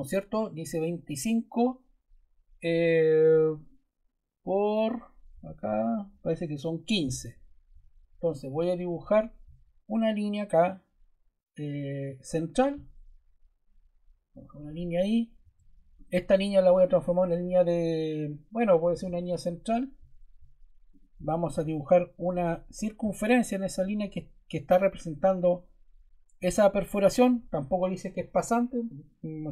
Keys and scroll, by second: 15.4 Escape.